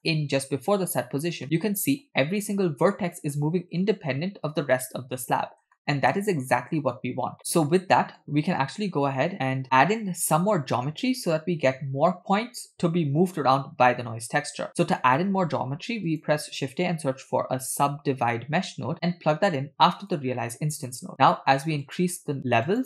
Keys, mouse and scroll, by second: 1.4-2.2 middle drag, 5.6 scroll down 3, 5.7-6.1 shift+middle drag, 6.3-6.8 scroll up 1, 7.4 middle click, 13.3 click, 14.4 click, 15.3 shift+a, 21.9 click, 22.7 click.